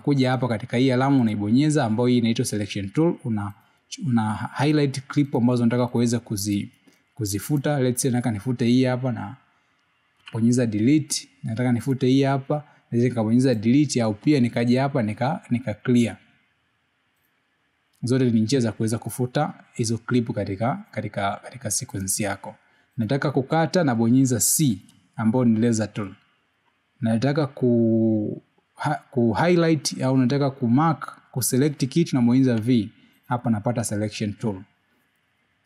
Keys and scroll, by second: 1.0 v, 27.5 c, 35.3 v.